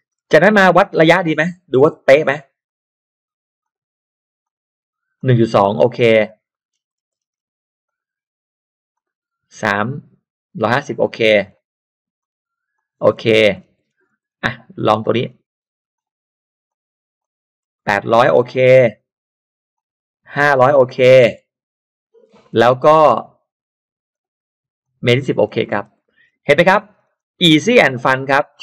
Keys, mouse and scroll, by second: 0.7 scroll down 1, 1.0-1.7 scroll up 2, 2.7 click, 3.6 click, 4.4 click, 5.1 click, 6.5 middle click, 6.5-7.6 scroll up 2, 7.9 click, 8.9 click, 9.5 click, 9.7-10.1 scroll down 1, 10.4-10.7 scroll up 1, 11.4 click, 12.1 click, 12.7 click, 13.0-14.5 scroll down 6, 14.7-15.3 scroll up 1, 15.9 click, 16.7 click, 17.2 click, 17.5-17.9 scroll up 1, 18.6 click, 19.7 click, 20.3 click, 20.5-21.3 scroll down 4, 22.2-22.9 scroll up 2, 23.1 click, 24.1 click, 24.8 click, 25.1-25.7 scroll down 1, 26.0 middle click, 26.0 space, 26.1 space, 26.2 scroll down 1, 26.7 scroll up 1, 26.9-27.2 scroll down 1, 27.1 space, 27.3 click, 28.0 space, 28.3 scroll up 1.